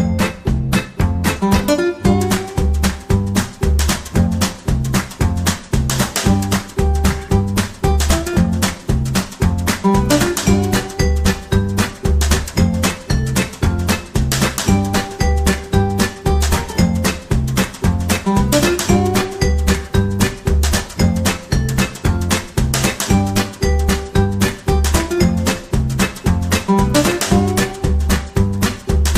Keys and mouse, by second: 2.5 g, 3.8 ctrl+r, 4.8 shift+middle click, 5.6 shift+middle click, 6.5 right click, 7.1 alt+z, 7.9 alt+z, 8.7 shift+right click, 9.7 shift+right click, 12.1 right click, 12.6 shift+middle click, 13.5 right click, 13.8 c, 15.8 v, 18.0 alt+z, 18.4 right click, 18.6 g, 19.6 right click, 19.7 g, 20.7 right click, 21.1 shift+middle click, 21.7 alt+z, 22.1 right click, 22.3 c, 24.2 g, 25.3 right click, 26.5 g, 28.6 right click.